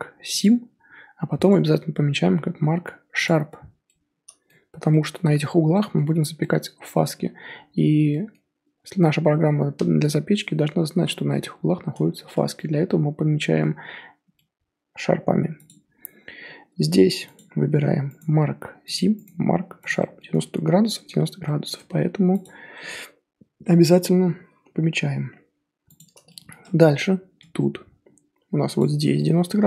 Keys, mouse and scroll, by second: 3.8-4.7 middle drag, 4.7 Tab, 4.9-7.1 middle drag, 7.1-7.8 scroll up 1, 8.1-11.4 middle drag, 11.4 Tab, 11.9 Tab, 12.3 Tab, 12.5-14.1 middle drag, 14.1 Tab, 14.2 scroll down 2, 14.3-15.1 middle drag, 15.1 scroll up 1, 15.6 click, 16.7 Tab, 17.3 click, 18.9-19.9 right drag, 19.9 middle click, 20.3 Tab, 21.4-21.7 middle drag, 21.7 Tab, 22.4 click, 22.7-25.0 middle drag, 25.0 Tab, 26.0 click, 26.2-26.9 shift+middle drag, 26.9 scroll up 2, 27.4 Tab, 27.9-28.5 scroll up 2, 28.8 alt+click, 29.1-29.6 middle drag.